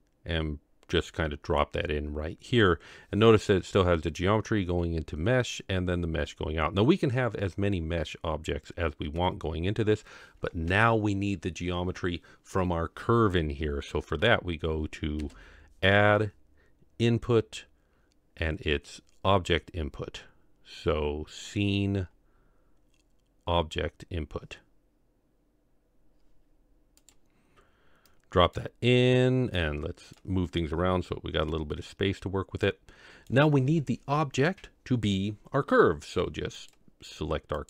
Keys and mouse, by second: 15.2 shift+a, 28.4 click, 29.6 click, 30.8 middle click, 32.6 click.